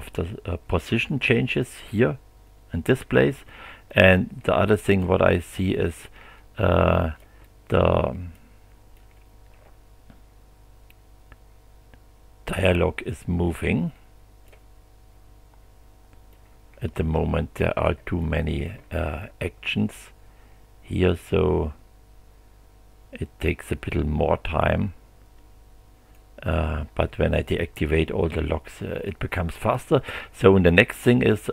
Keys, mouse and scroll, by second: 3.9-5.3 drag, 5.7-8.6 drag, 8.9-14.7 drag, 16.3-17.7 drag, 18.2 click, 19.0 click, 21.1-26.3 drag.